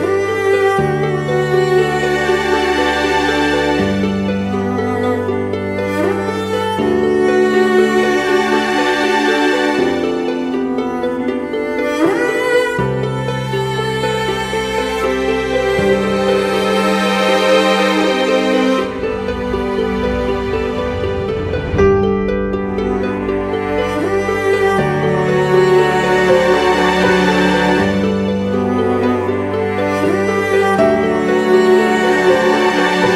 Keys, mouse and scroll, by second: 0.0-0.6 scroll up 1, 0.6-1.2 scroll down 1, 1.2 scroll up 1, 1.6-2.5 scroll down 1, 2.7 ], 2.8-3.6 scroll down 1, 3.6 scroll down 1, 4.5 ], 10.8 ctrl+-, 17.5 e, 19.9 scroll up 2.